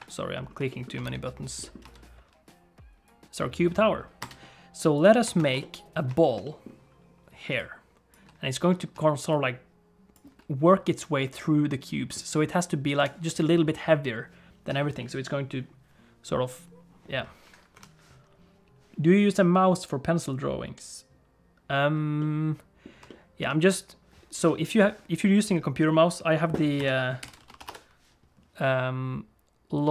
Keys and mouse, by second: 0.6 shift+click, 1.0 n, 1.6 middle click, 1.8 space, 4.2 space, 5.4 ctrl+s, 5.6 middle click, 6.2 shift+middle click, 6.4 middle click, 7.4 d, 7.5 click, 8.1 d, 8.1 d, 8.9 d, 9.3-10.3 drag, 10.1 d, 10.2 d, 10.2 d, 12.1 d, 12.1 right click, 12.9 d, 17.7 KP_1, 22.2 middle click, 23.0 shift+middle click.